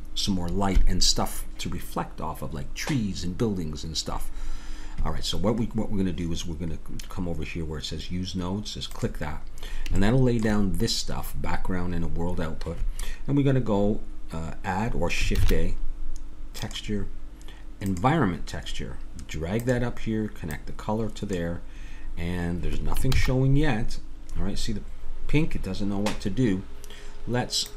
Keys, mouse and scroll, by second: 9.0-13.9 drag, 15.4 shift+a, 20.5-23.2 drag, 23.2 shift+z, 27.7 click.